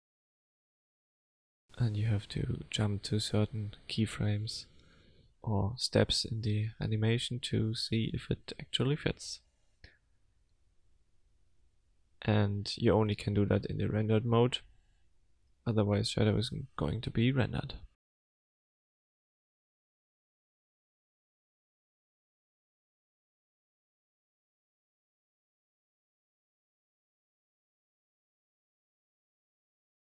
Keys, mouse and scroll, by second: 2.5 click, 3.8 scroll up 3, 4.4 shift+middle click, 5.2 scroll up 2, 6.9 click, 7.2 click, 8.1 click, 8.4 click, 8.6 click, 9.0 click, 9.1 click, 9.2 click, 9.4 click, 9.5 click, 9.7 click, 9.9 click, 10.0 click, 10.2 click, 10.4 click, 10.5 click, 10.7 click, 10.8 click, 11.0 click, 11.3-11.7 scroll down 5, 12.4 scroll up 2, 13.2 scroll down 2, 13.7 shift+middle click, 14.2-14.7 scroll down 2, 15.3 click, 17.7 scroll up 1, 18.1 shift+middle click, 18.7 scroll up 2, 19.5 click, 21.5 click, 23.7 shift+middle click, 24.9 click, 27.1 click.